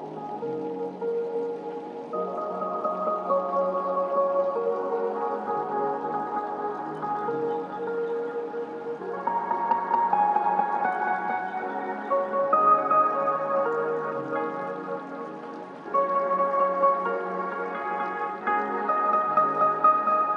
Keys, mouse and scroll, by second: 3.3 scroll up 1, 5.2 scroll down 1, 11.8-19.2 drag, 19.2 scroll up 1.